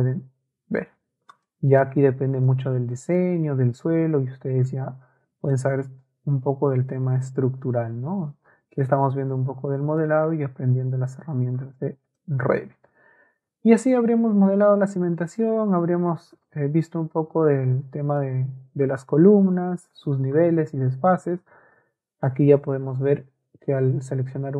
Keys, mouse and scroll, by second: 1.3 click, 2.5 shift+middle click, 5.5-7.3 shift+middle drag, 9.3 shift+middle click, 20.4 click, 21.6 click, 24.2 ctrl+a.